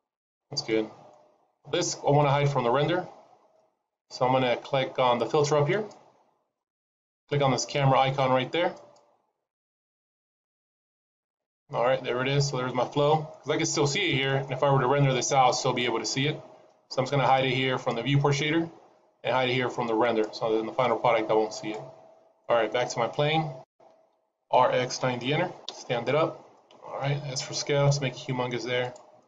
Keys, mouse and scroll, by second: 0.6 middle click, 1.3-2.1 scroll down 2, 2.1 click, 2.1 scroll down 1, 5.6 click, 13.3 middle click, 13.8 shift+middle click, 14.3 middle click, 15.2-15.5 scroll up 1, 17.8 click, 20.1 click, 21.5 click, 22.3 middle click, 24.1 r, 26.5 middle click, 27.3 s, 29.1 middle click.